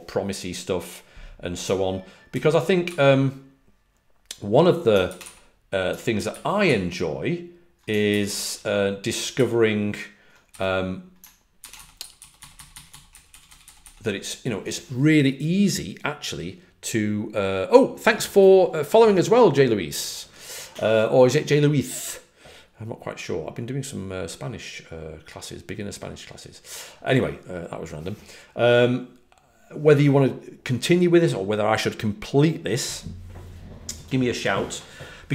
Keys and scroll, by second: 6.6 ctrl+d, 8.1 h, 9.2 ctrl+d, 11.4-14.2 typing.